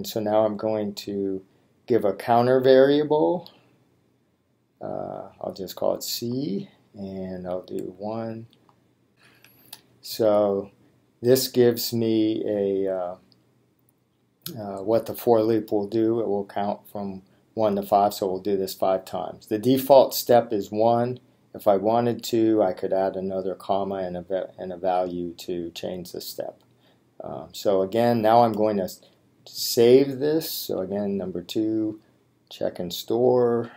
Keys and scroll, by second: 4.9 c, 6.2 Right, 8.0 1, 8.6 Right, 9.1 5, 29.5 Menu, 30.8 Down.